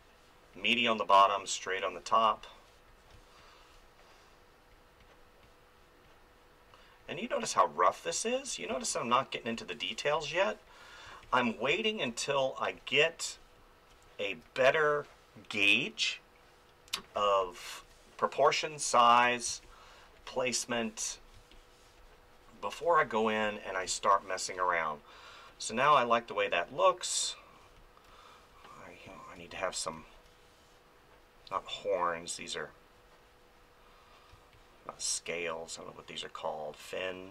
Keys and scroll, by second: 2.2 space, 8.7 space, 11.0 space, 17.1 space, 19.5 space, 21.3 space, 29.4 space, 31.5 space, 34.3 space.